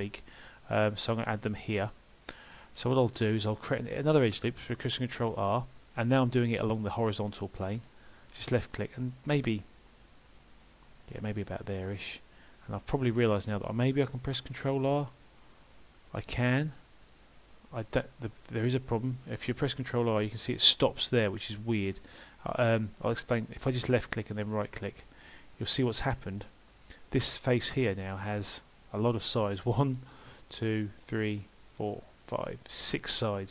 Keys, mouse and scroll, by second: 0.2 middle click, 12.7 middle click, 14.3 ctrl+r, 18.2 middle click, 20.2 ctrl+r, 24.9 middle click, 26.0 scroll up 2, 28.3 click, 30.4 shift+click, 31.0 shift+click.